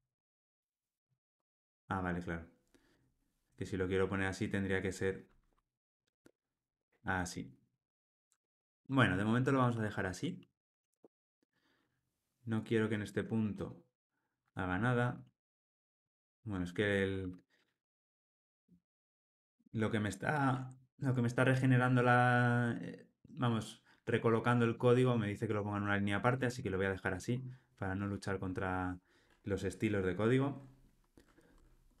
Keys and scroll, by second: 10.4 alt+super+l, 10.7 ctrl+alt+o, 16.0 alt+super+l, 17.5 super+z, 18.1 super+z, 18.8 super+z.